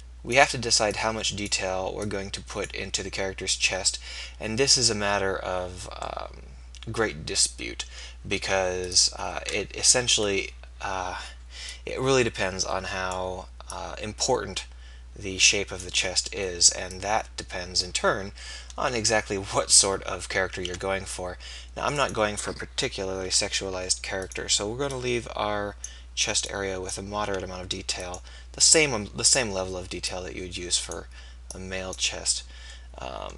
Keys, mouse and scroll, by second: 9.8 KP_3, 10.2 KP_1, 20.6 shift+d, 22.1-23.4 drag, 23.4 r, 25.0-33.3 drag, 27.4 s.